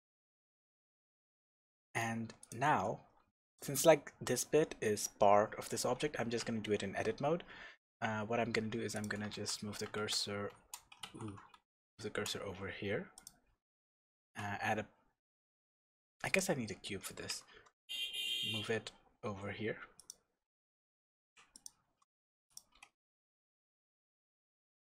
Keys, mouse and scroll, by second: 0.2 Tab, 0.5-1.3 scroll down 1, 1.3 scroll up 1, 2.4 click, 2.8-3.2 scroll down 1, 3.2 Tab, 3.5 click, 5.6 click, 6.4 Tab, 8.9 click, 9.3 shift+s, 11.0 ctrl+z, 11.5 shift+s, 14.2 shift+a, 17.5 g, 20.1 click, 20.5 s, 21.6 click, 21.8 g, 22.6 click, 22.7 s.